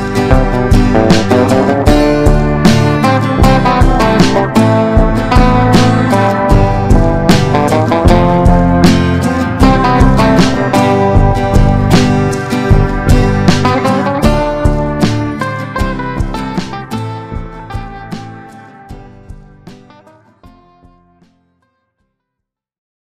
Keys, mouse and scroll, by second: 4.4 click.